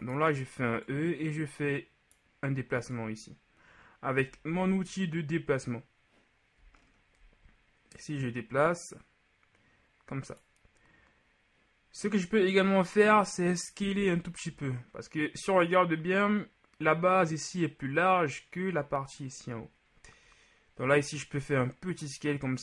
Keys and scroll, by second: 4.6 ctrl+z, 14.0 s.